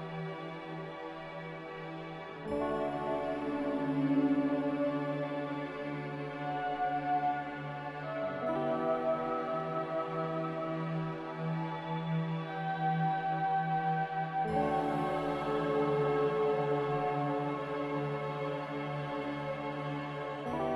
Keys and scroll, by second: 2.1-2.8 typing, 13.3 a, 17.5 ctrl+z.